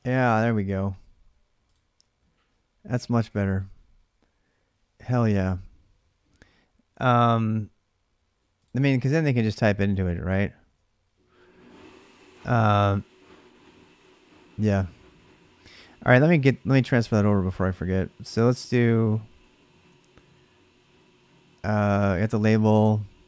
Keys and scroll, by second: 9.2-10.4 typing, 15.9 alt+Tab, 17.9-21.4 typing, 22.8-23.2 typing.